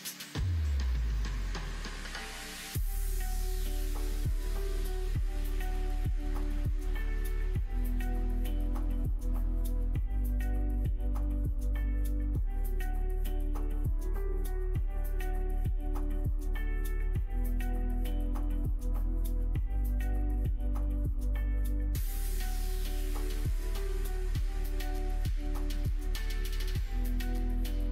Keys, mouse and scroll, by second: 1.5 e, 4.9 s, 9.2 g, 12.5 middle click, 12.8 shift+middle click, 14.6 shift+middle click, 15.3 e, 20.2 middle click, 20.7 e, 25.0 e, 27.7 middle click.